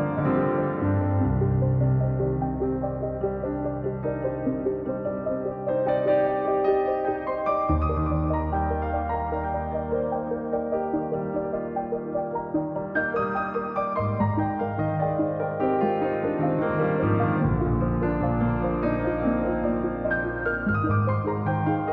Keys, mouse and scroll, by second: 1.1-2.2 drag, 3.1-4.3 drag, 4.3-4.7 scroll down 3, 4.8 click, 5.1-5.9 scroll up 1, 5.9 click, 6.3 scroll up 2, 6.5-7.6 drag, 12.7-13.9 drag, 14.3-15.5 drag, 15.8-17.2 drag, 17.2-17.9 scroll down 5, 17.9-18.3 scroll up 3, 18.3-20.0 drag, 20.5-20.9 scroll down 4.